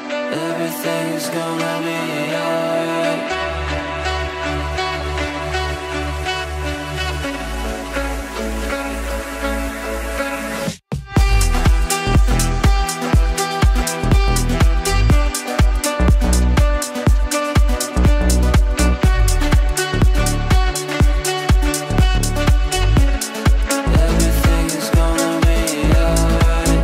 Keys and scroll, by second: 3.1 Delete, 17.0 shift+F2, 17.2 F3.